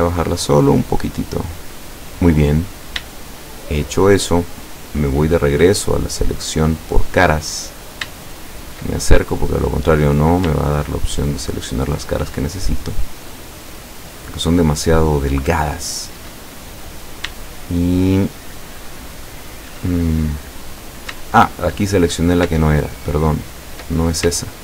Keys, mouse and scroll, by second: 2.7-3.1 scroll up 1, 3.2 shift+middle click, 5.2 click, 6.3 right click, 6.8 right click, 7.2 right click, 7.7-8.0 scroll up 1, 8.2-8.9 shift+middle drag, 9.7 right click, 11.7 shift+right click, 12.2 shift+right click, 13.0 shift+middle click, 13.7 shift+scroll up 1, 14.7 shift+right click, 15.1-16.4 shift+middle drag, 16.5-16.8 shift+scroll down 2, 17.5-19.8 shift+middle drag, 20.7 scroll down 2, 21.3 shift+middle click, 22.1 shift+scroll up 3, 23.5 shift+right click, 24.0-24.3 shift+scroll up 2, 24.4 shift+middle click.